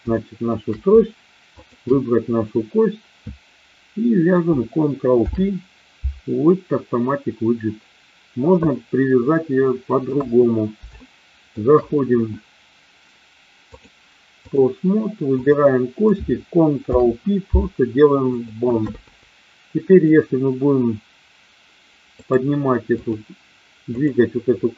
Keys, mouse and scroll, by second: 0.2 shift+middle drag, 1.7 shift+click, 5.0 ctrl+p, 9.7-10.0 middle drag, 10.0 KP_1, 11.0-11.4 shift+middle drag, 13.7-14.5 drag, 15.4 click, 16.8 ctrl+p, 19.8 click, 22.3-23.0 drag, 23.9 click.